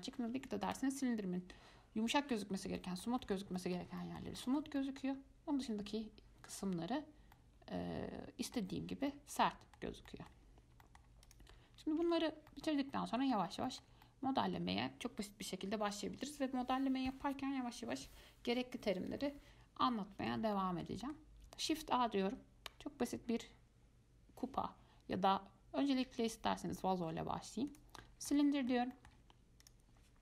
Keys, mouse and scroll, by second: 2.2-2.6 scroll up 1, 3.0-9.1 shift+middle drag, 9.1 scroll down 1, 9.3-11.4 middle drag, 11.4 click, 12.2 x, 12.7-17.3 middle drag, 20.8-21.9 shift+middle drag, 21.9 shift+a, 28.5-29.3 middle drag, 29.3-29.8 scroll down 1, 29.8-30.2 drag.